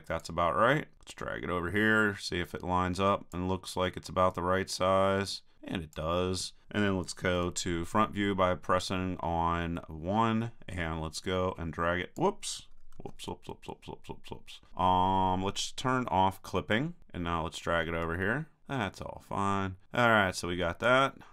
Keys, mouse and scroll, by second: 0.2-3.0 drag, 4.3-5.7 drag, 7.3 KP_1, 10.7 middle click, 11.1-12.6 drag, 12.7 super+click, 12.9 super+z, 17.0-18.6 drag.